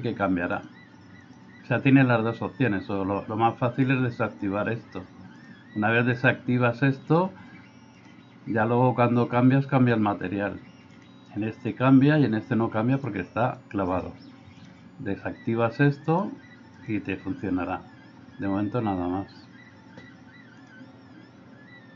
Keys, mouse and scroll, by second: 0.6 drag, 1.2 click, 14.6 drag, 16.0 click.